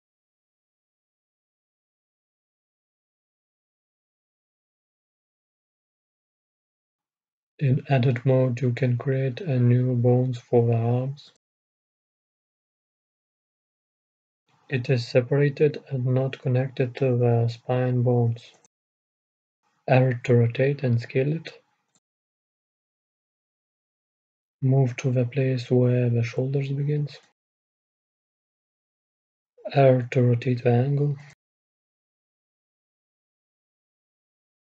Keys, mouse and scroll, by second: 4.6-9.3 middle drag, 5.8 a, 7.1 shift+a, 10.8-15.3 right drag, 12.1 g, 16.1 r, 19.6 s, 23.3-30.1 drag, 29.9 r, 32.0-34.2 drag, 34.3-34.7 drag.